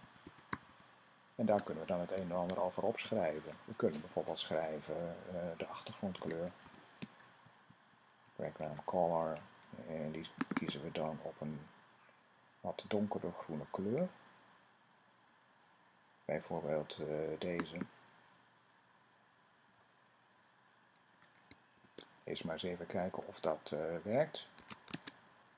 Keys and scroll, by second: 0.0-1.0 typing, 2.0 typing, 5.7-8.1 typing, 7.2 Down, 7.4 Down, 19.5 ;, 21.6 }, 24.3 super+s.